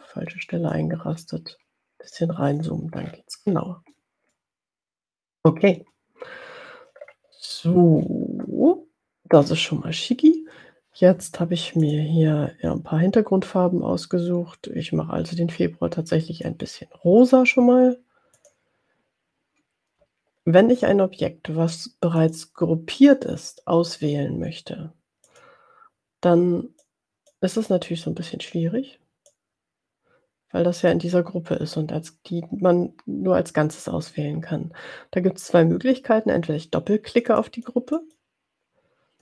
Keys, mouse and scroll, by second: 0.7-2.7 drag, 2.8 click, 2.9-3.9 ctrl+scroll down 2, 4.4 click, 4.9-5.9 middle drag, 7.1-8.0 ctrl+scroll up 2, 12.2 click, 15.4 click, 18.5 click, 25.6 click, 26.9-27.8 drag, 29.3-31.1 drag, 37.2 click, 38.2 click.